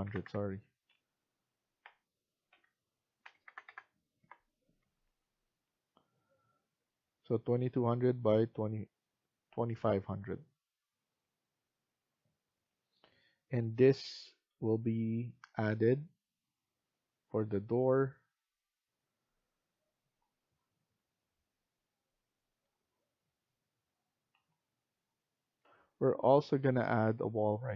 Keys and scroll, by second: 0.0-5.3 typing, 4.1 Return, 10.0 Escape, 20.2 Escape, 24.2 Escape, 25.5 F1.